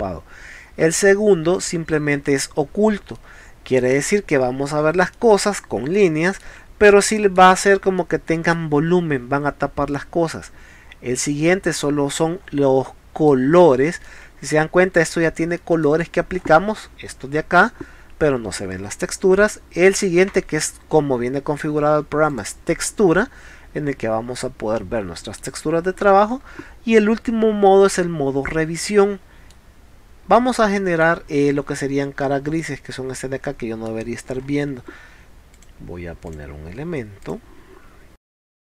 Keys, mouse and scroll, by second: 1.6 click, 2.6 middle drag, 3.2 middle click, 5.1 middle click, 8.0-8.5 middle drag, 11.2 click, 11.7 scroll down 1, 12.4 scroll up 1, 12.9-13.3 middle drag, 13.6 scroll up 1, 14.1-14.5 middle drag, 15.6 middle click, 16.3 scroll up 1, 17.9 scroll down 1, 18.8 scroll up 1, 22.3 click, 23.3 middle click, 25.8 scroll down 2, 29.4 middle click, 30.6-31.1 middle drag, 31.3 scroll down 2, 32.2 middle click, 33.5 middle click, 34.4 scroll up 1, 35.6 click, 36.3 click, 37.3 click.